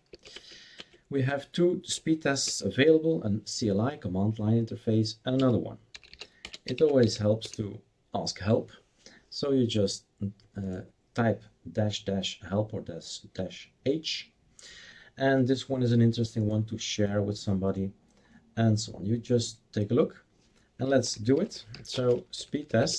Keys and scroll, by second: 0.0-0.1 typing, 0.3 Tab, 0.8 Tab, 1.8-2.5 typing, 5.5-9.0 typing, 20.6-22.9 typing.